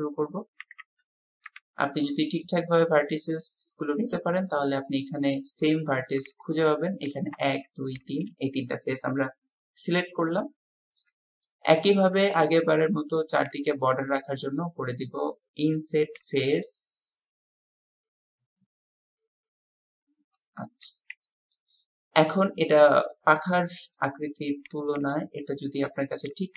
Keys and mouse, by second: 0.6 Tab, 1.0-1.5 drag, 7.9 shift+click, 11.1 click, 11.2 typing, 14.1-15.4 drag, 21.2 click, 22.8 click, 23.8 click.